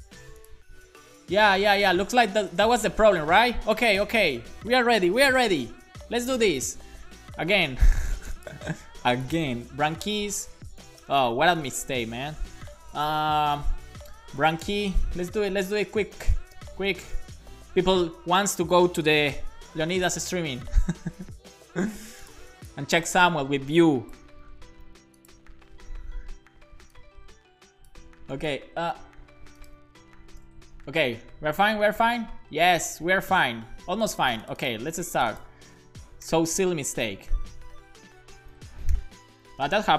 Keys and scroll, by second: 5.1 Return, 5.4 shift+[, 6.4 space, 8.7 super+c, 9.6 super+v, 10.0-12.1 typing, 12.3 Left, 14.3-17.1 typing, 19.3 shift+9, 20.0 Return, 24.8 super+c, 25.7 super+v, 28.4 BackSpace, 28.7 super+s, 30.4 alt+shift+f, 30.8 super+s, 34.9 super+c, 36.0 BackSpace, 36.3 shift+[, 36.8 super+v, 37.1 BackSpace, 39.4 super+v, 39.6 super+s.